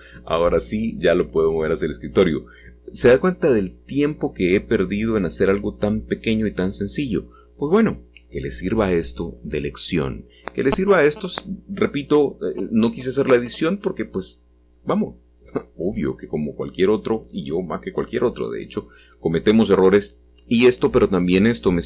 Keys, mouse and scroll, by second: 0.8-2.7 scroll down 1, 3.5-6.1 drag, 6.5 middle click, 7.7 middle click, 11.3 g, 14.9 click, 16.2 middle click, 17.0 middle click, 19.2-21.8 middle drag.